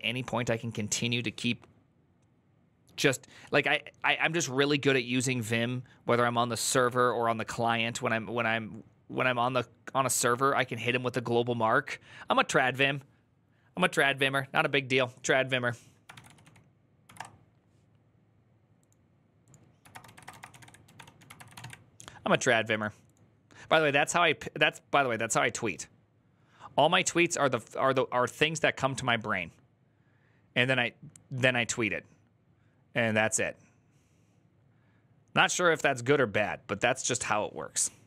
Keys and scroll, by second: 15.9 ctrl+t, 15.9-16.8 typing, 16.9 Return, 19.4-21.9 typing.